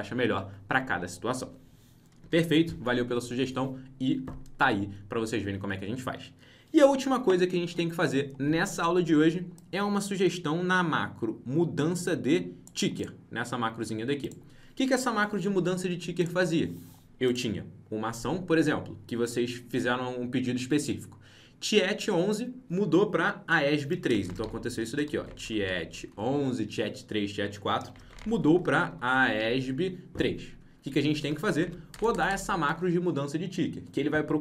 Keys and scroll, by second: 2.2 ctrl+b.